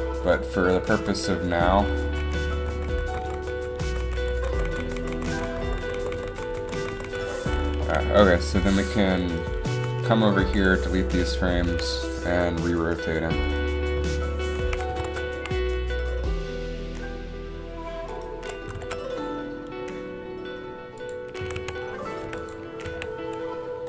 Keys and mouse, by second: 0.8-6.9 Right, 7.1 Right, 7.4 Right, 8.0 a, 9.9 Up, 10.5 Delete, 11.8 a, 14.2 KP_7, 15.1 r, 18.8 r, 21.6 a, 21.7 a, 22.4 i, 23.0 a.